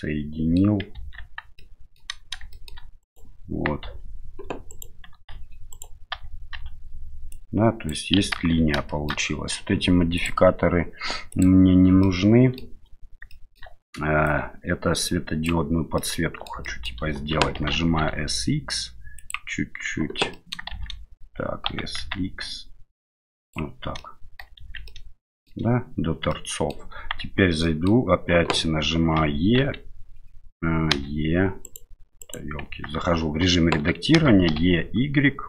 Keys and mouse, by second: 1.0 Tab, 1.6-2.0 middle drag, 2.5 shift+middle drag, 3.0 right click, 3.8 Tab, 4.7 right click, 5.1 g, 6.1 a, 6.5 a, 7.3 click, 8.4 ctrl+z, 8.9 shift+middle click, 10.2 click, 11.3 click, 12.0 middle click, 13.3 shift+middle click, 14.3-15.5 drag, 15.9 middle click, 16.6 shift+middle click, 17.6 s, 20.3 middle click, 20.7 shift+z, 21.7 s, 24.0 middle click, 24.6 shift+z, 24.8 middle click, 26.3 middle click, 27.2 Tab, 27.6 middle click, 29.2 e, 29.6 x, 30.9 e, 31.6 right click, 32.7 Tab, 34.1 e.